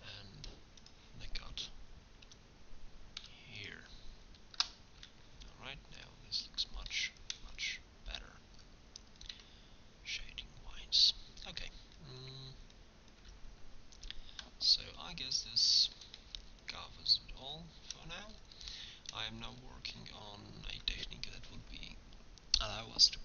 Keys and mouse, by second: 5.0 Tab, 9.4 Tab, 13.2 Tab.